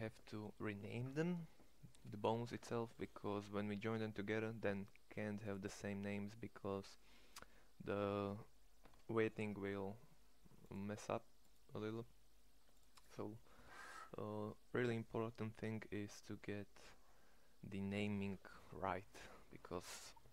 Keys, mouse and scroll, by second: 2.5 Tab.